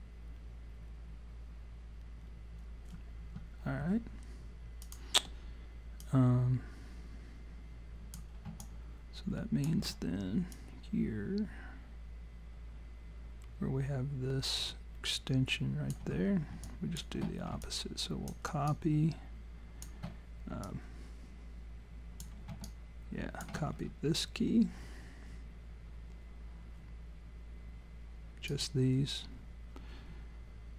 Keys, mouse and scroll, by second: 4.8 click, 6.0 click, 8.6 alt+click, 10.6 click, 16.7 alt+click, 17.6 alt+click, 20.7 alt+click, 22.7 alt+click, 23.7-24.1 scroll up 3, 28.5 click.